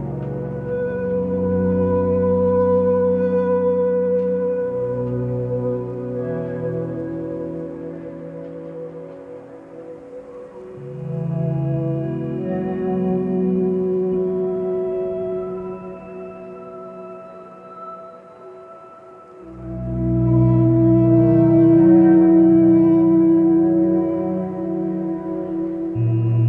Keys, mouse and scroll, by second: 12.2 x, 14.8 x, 18.0 ctrl+space, 20.0 click, 21.9 ctrl+z, 24.9 ctrl+z.